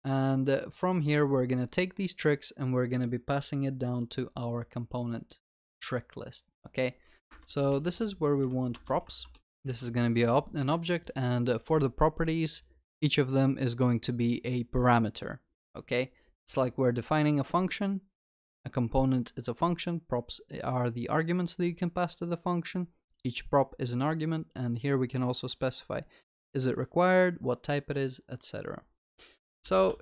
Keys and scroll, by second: 8.8 Return.